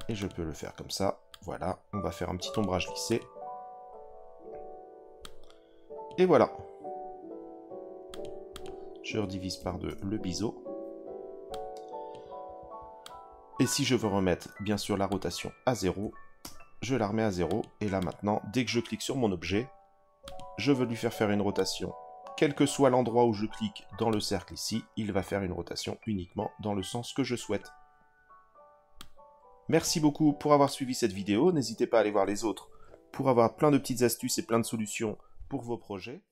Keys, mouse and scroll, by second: 1.3 right click, 1.9-2.6 drag, 2.6-3.1 drag, 5.2 click, 8.1-9.8 drag, 11.5 click, 13.0 click, 15.1-16.4 drag, 17.4 click, 18.0 click, 20.2 click, 21.5 click, 24.1 click, 28.9 click, 29.1 click, 30.6 click, 31.4 middle click.